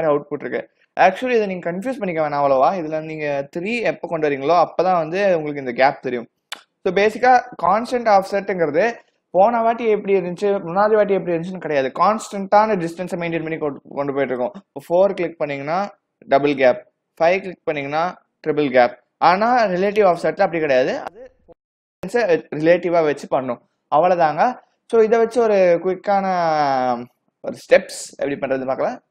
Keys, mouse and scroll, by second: 2.6 click, 14.3 click, 16.6 click, 20.1 click, 20.9 click, 26.7 click.